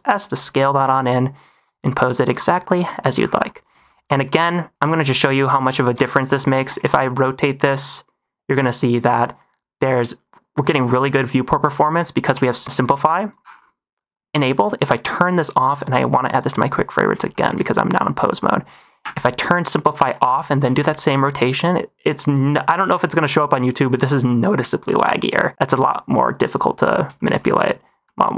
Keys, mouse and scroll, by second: 0.2 middle click, 0.7 r, 1.5 click, 1.8 middle drag, 2.1 -, 2.4 middle click, 3.1 -, 3.4 middle drag, 3.8 shift+middle drag, 4.1 middle click, 4.7 click, 5.0 middle click, 5.6 shift+middle drag, 5.9 middle drag, 6.5 r, 6.7 x, 11.0 middle drag, 11.8 middle drag, 12.2 q, 12.7 click, 15.6 right click, 17.2 shift+middle drag, 18.3 middle click, 18.9 q, 20.0 q, 20.2 middle drag, 20.5 r, 20.6 x, 27.1 shift+middle click, 27.3 middle drag, 28.0 middle drag.